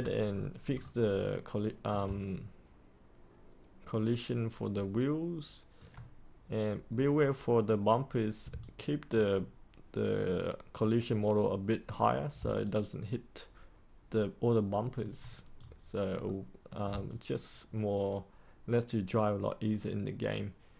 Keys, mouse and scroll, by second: 0.2-1.6 scroll up 1, 2.0-5.8 alt+drag, 8.5 alt+click, 12.5-14.9 alt+drag, 15.5 click, 16.2 middle click, 17.0-20.7 alt+drag.